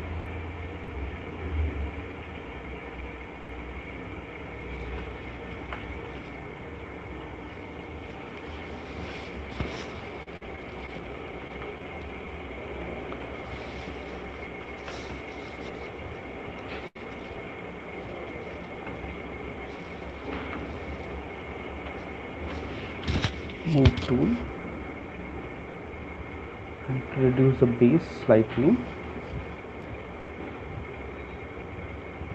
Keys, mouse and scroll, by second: 0.8 middle click, 0.8 click, 1.2 click, 1.8 click, 2.6 right click, 2.7 click, 3.3 click, 3.7 click, 6.9 right click, 7.1 alt+click, 7.7 click, 11.1 click, 11.6 alt+click, 13.0 right click, 13.2 alt+click, 15.3 typing, 17.5 ], 17.7 ], 17.9 ], 18.1 ], 19.3 click, 20.3 ctrl+z, 21.6-22.6 typing, 25.5 click, 26.9 click, 28.0 click, 31.4 click.